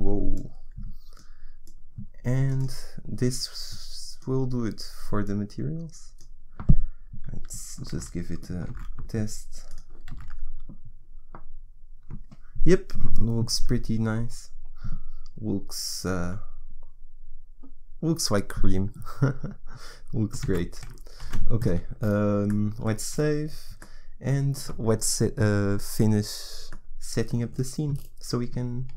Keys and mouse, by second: 7.8 shift+z, 8.6 shift+z, 23.1 ctrl+s, 23.1 shift+z, 28.8 ctrl+s.